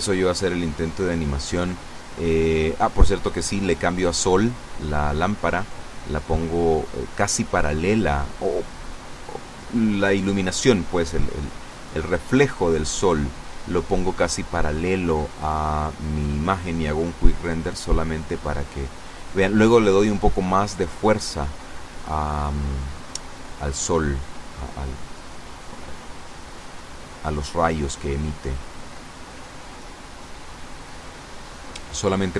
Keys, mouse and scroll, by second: 0.3 middle click, 1.3 scroll down 1, 2.2 right click, 5.1 click, 6.8-7.8 drag, 7.8-10.1 middle drag, 10.7 r, 11.1 z, 13.4 click, 13.8-15.2 middle drag, 15.7 F12, 22.0 Escape, 22.4 middle click, 23.8 click, 24.3 middle click, 25.5 click, 27.0 F12.